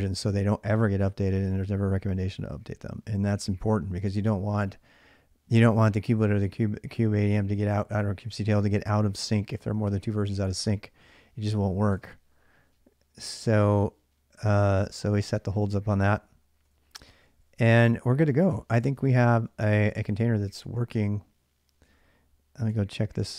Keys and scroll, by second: 11.7 Return, 14.6 ctrl+a, 14.8 ctrl+a, 15.7-18.1 typing, 18.8 ctrl+a, 19.0 ctrl+a, 19.5-20.4 typing, 21.6 ctrl+a, 21.6 BackSpace, 22.4 2, 23.2 ctrl+[.